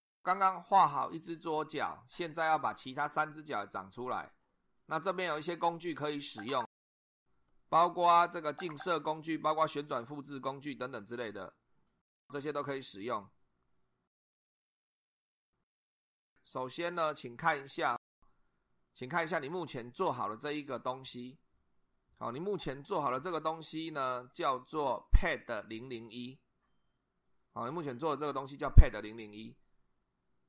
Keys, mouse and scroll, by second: 20.1 click.